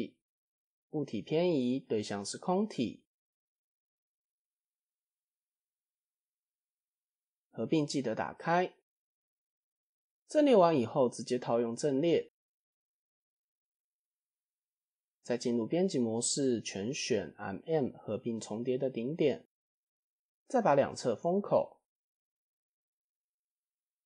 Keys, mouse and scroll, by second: 0.6 click, 1.7 click, 5.0 click, 5.2 click, 5.4 click, 5.6 click, 6.0 click, 6.4 click, 7.8 click, 8.4-8.9 middle drag, 9.0 scroll down 1, 9.5-10.1 middle drag, 10.5 middle click, 10.8 scroll down 1, 12.3 click, 12.8 middle click, 13.2 Tab, 13.7 middle click, 14.6 1, 15.1 a, 16.1 m, 17.8 scroll up 2, 18.2 click, 18.8 alt+click, 19.4 middle click, 20.1 f, 20.4 middle click, 21.4 click, 22.0 alt+click, 22.4 middle click, 23.0 g.